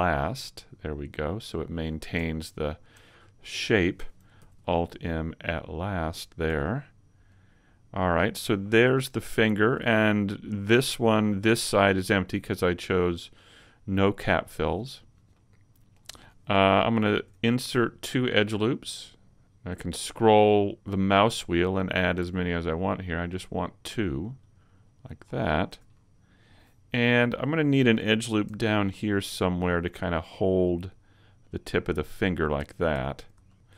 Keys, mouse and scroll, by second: 1.7 right click, 2.6 shift+right click, 4.3 alt+m, 6.5 a, 6.7-7.3 scroll down 4, 7.3 middle click, 8.1-8.5 scroll up 1, 8.5 shift+middle click, 9.5 middle click, 10.0 middle click, 11.1-11.5 scroll down 3, 11.5 middle click, 14.6 shift+middle click, 14.9-15.7 scroll up 2, 15.3 middle click, 17.1 ctrl+r, 24.8 click, 25.2-25.7 scroll down 2, 25.7 a, 25.9 middle click, 27.0 middle click, 28.5 ctrl+r, 32.1 click, 32.4 middle click, 32.9 a, 33.5 shift+middle click.